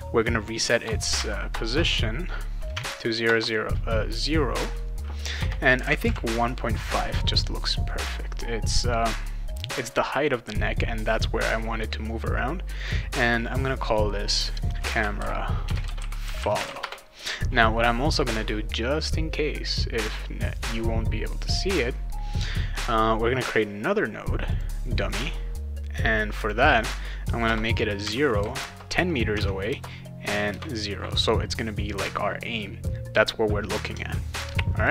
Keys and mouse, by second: 1.1 Tab, 2.7 Tab, 5.4 BackSpace, 12.8 click, 13.4 click, 13.8 click, 14.5-17.1 typing, 14.6 click, 18.1 right click, 24.5 click, 25.1 click, 26.4 click, 26.6 click, 28.0 Tab, 29.3 Tab, 34.8 click.